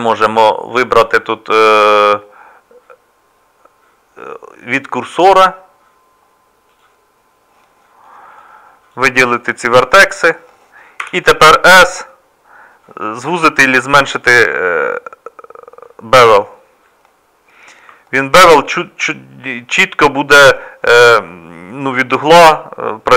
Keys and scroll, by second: 11.0 s.